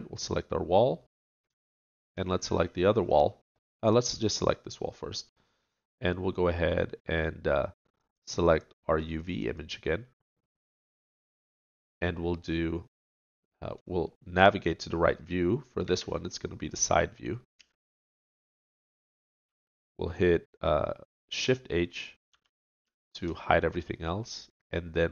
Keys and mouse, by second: 0.7 middle click, 0.9 click, 1.7-4.4 middle drag, 4.4-5.6 drag, 9.5 middle click, 11.4 middle click, 12.3-14.0 drag, 14.3 middle click, 14.6 middle click, 15.8 KP_3, 17.6 KP_5, 22.3 shift+h.